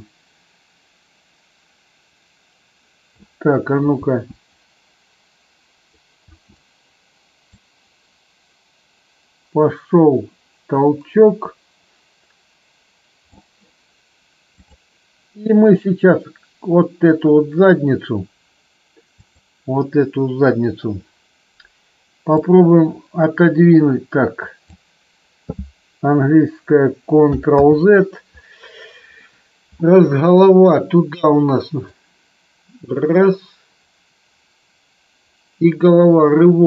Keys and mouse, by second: 4.0 space, 6.3 space, 7.5-13.3 drag, 14.5 click, 19.1-19.7 drag, 22.3-24.7 drag, 27.6 ctrl+z, 31.9-36.6 drag.